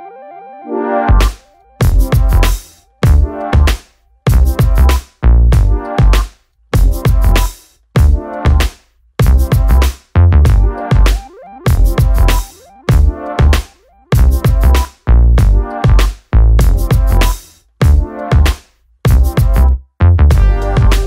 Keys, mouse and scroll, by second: 0.5 click, 1.0 click, 1.4 r, 2.0 g, 2.8 click, 3.1 click, 3.9 click, 4.2 click, 4.7 alt+a, 4.9 click, 5.4 g, 6.2 r, 7.0 alt+a, 7.3 click, 7.7 alt+d, 8.3 r, 8.9 r, 10.7 s, 11.3 g, 12.6 click, 12.9 alt+d, 13.7 g, 14.3 g, 14.6 r, 15.3 g, 16.6 shift+middle click, 16.9 alt+a, 17.9-18.9 drag, 19.4-20.5 drag.